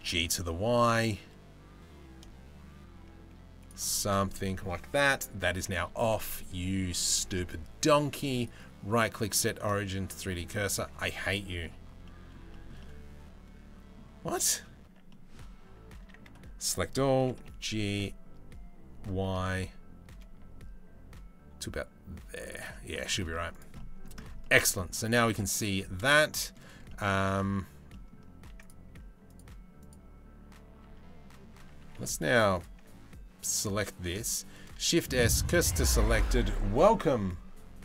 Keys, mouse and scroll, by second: 3.9-5.4 middle drag, 8.0-9.9 drag, 10.8-11.2 middle drag, 11.5-11.9 middle drag, 12.1 shift+middle click, 14.7 middle click, 15.5 Tab, 15.7 a, 16.8 g, 22.3 middle click, 23.1 Tab, 23.1 click, 23.4 middle drag, 24.0-24.5 middle drag, 25.2 click, 25.7-26.2 middle drag, 26.5 middle drag, 27.5 middle click, 29.5 click, 30.4 Tab, 31.2 Tab, 31.5 a, 34.0 shift+s.